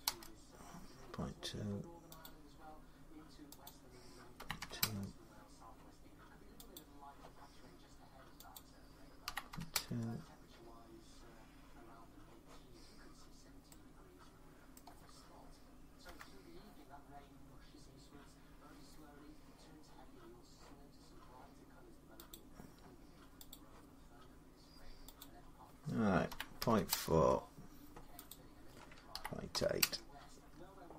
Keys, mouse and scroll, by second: 2.0 click, 3.5 click, 4.2 typing, 4.6 Return, 6.5 click, 8.3 click, 9.1 typing, 9.5 Return, 12.9 middle click, 13.0 middle click, 13.2 middle click, 13.4 middle click, 14.1 scroll, 14.5 middle click, 15.8 F12, 17.1-17.4 scroll, 22.1 click, 23.3 click, 25.0 click, 26.1-26.4 typing, 26.7 Return, 28.1 click, 28.9-29.6 typing.